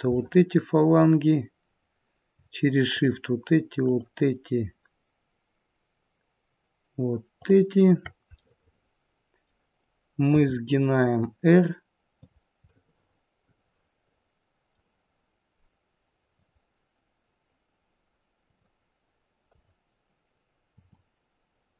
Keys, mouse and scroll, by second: 0.2 middle click, 0.2-2.3 scroll up 1, 2.9 shift+click, 7.3 shift+click, 8.3 middle click, 10.3 r, 12.7 middle click, 16.3 click, 18.4 click, 20.7 click, 20.7 r.